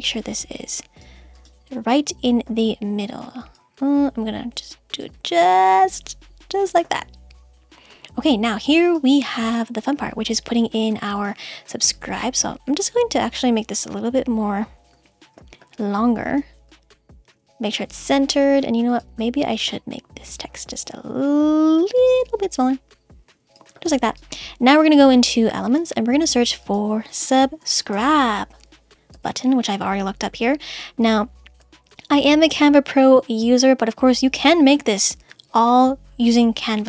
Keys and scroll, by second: 28.8 Down, 29.1 Return.